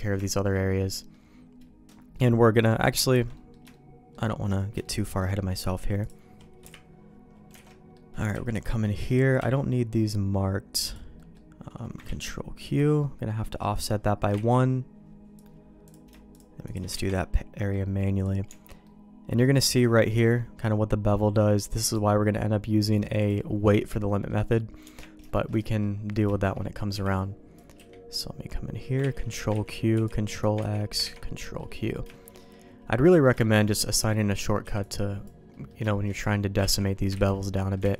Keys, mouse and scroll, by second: 0.2 shift+middle click, 0.8 middle click, 2.6 middle click, 3.0 shift+middle click, 3.3 middle click, 3.7 shift+middle click, 4.8 shift+middle click, 6.0 click, 6.6 KP_Decimal, 7.6 alt+a, 7.6 middle click, 8.3 b, 9.3 q, 11.1 middle click, 12.1 ctrl+q, 13.7 click, 14.3 ctrl+x, 15.8 click, 16.3 shift+click, 16.9 ctrl+x, 17.0 middle click, 17.9 middle click, 18.4 Tab, 18.8 middle click, 21.9-23.2 drag, 24.0 middle click, 24.8 Tab, 25.2 shift+middle click, 25.6 middle click, 26.3 shift+middle click, 26.5 middle click, 26.9 b, 27.7 q, 29.0 ctrl+q, 29.5 ctrl+x, 29.9 b, 30.6 ctrl+q, 31.0 ctrl+x, 31.4 middle click, 32.1 shift+middle click, 32.4 middle click, 33.1 middle click, 33.4 shift+middle click, 33.9 middle click, 34.6 b, 35.5 middle click, 35.9 shift+middle click, 36.6 ctrl+q, 37.1 ctrl+x, 37.5 middle click.